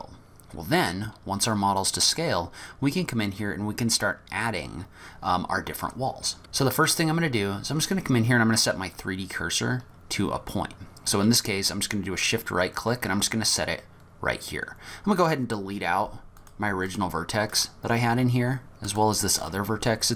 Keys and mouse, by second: 6.9 click, 12.3 shift+click, 16.4 click, 16.9 click, 17.5 click, 18.1 Delete, 19.0 click, 19.4 Delete.